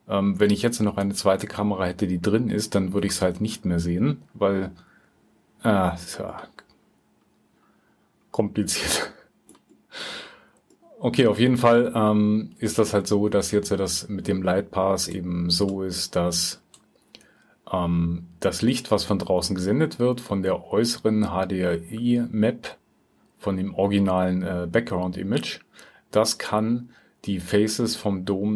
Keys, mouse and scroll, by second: 8.1-9.6 drag, 10.1-10.7 drag, 11.9 click.